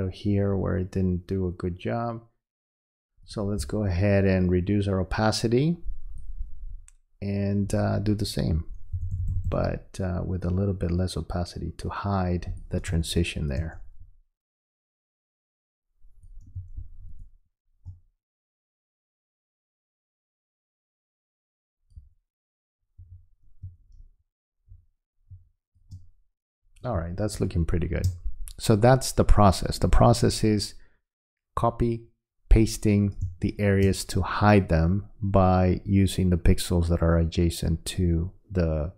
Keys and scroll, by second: 12.9 space, 16.6 space, 23.0 v, 33.2 space.